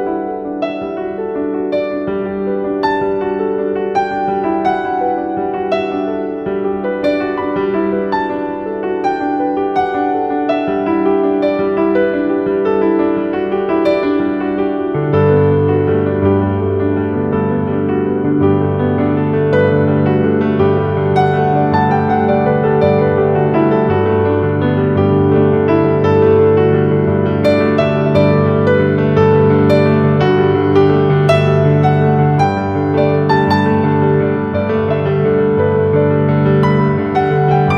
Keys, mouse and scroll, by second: 2.1 right click, 4.0 click, 5.6-8.9 typing, 10.0 typing, 10.1-13.7 shift+drag, 13.7-18.1 drag, 19.3 click, 21.8-24.1 drag, 24.1 shift+Down, 26.6 z, 33.0 click, 33.3 space, 33.4-37.6 drag.